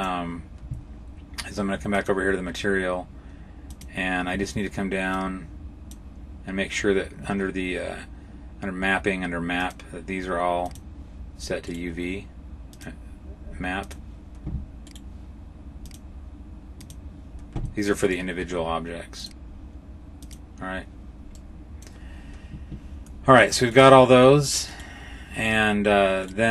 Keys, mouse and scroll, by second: 1.8 click, 3.5 click, 5.0 click, 9.5 click, 11.6 right click, 12.6 click, 14.9 right click, 15.7 click, 17.9 right click, 19.1 click, 21.2 middle click, 23.6 right click, 24.6 right click, 24.6 middle click, 25.4 right click, 26.1 right click.